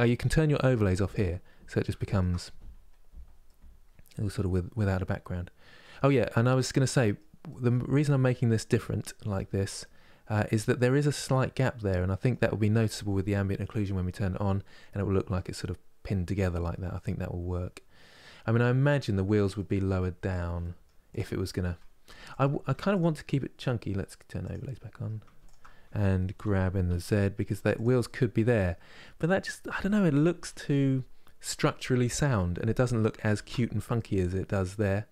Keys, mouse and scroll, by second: 0.8 click, 1.7 shift+middle click, 2.1 scroll up 1, 2.7-3.1 scroll down 1, 3.1-18.1 middle drag, 18.9-20.3 scroll down 1, 20.3 middle click, 20.8 click, 21.8 Tab, 22.0 click, 22.3 Tab, 22.6-26.1 drag, 26.1 g, 27.7-30.1 middle drag, 30.1 KP_3, 33.1 ctrl+z, 33.7-35.1 middle drag.